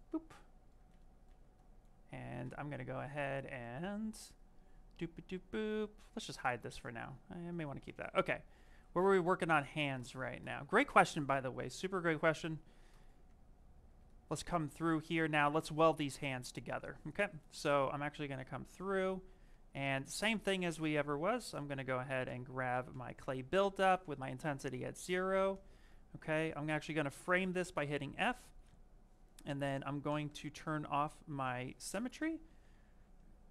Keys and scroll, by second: 13.2 s, 20.1 s.